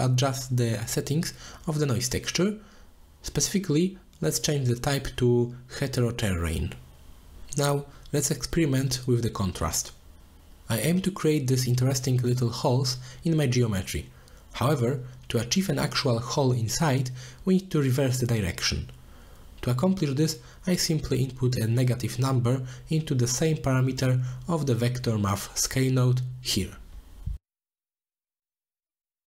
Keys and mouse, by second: 0.6 click, 2.5-4.3 drag, 6.7-9.3 drag, 11.1-14.6 drag, 16.3 middle click, 16.6 shift+middle drag, 17.6 middle drag, 18.1 shift+middle drag, 18.7 shift+middle drag, 19.6 middle click, 19.9 middle drag, 20.6 middle click, 21.3-27.6 drag, 24.2 Right, 24.7 Right, 25.4 BackSpace.